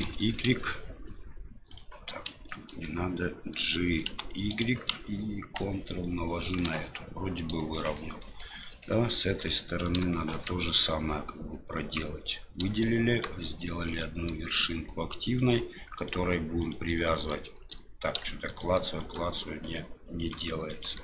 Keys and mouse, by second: 2.4 ctrl+click, 4.0 g, 7.9 shift+middle click, 8.3 shift+middle click, 8.7 shift+middle click, 9.1 shift+middle click, 10.1 shift+middle click, 11.7 click, 13.1 shift+right click, 13.8 shift+right click, 14.4 shift+right click, 15.3 shift+right click, 15.9 shift+right click, 16.6 shift+right click, 16.9 shift+right click, 17.1 shift+right click, 18.5 shift+right click, 19.0 shift+right click, 19.6 shift+right click, 20.2 shift+right click, 20.7 shift+right click.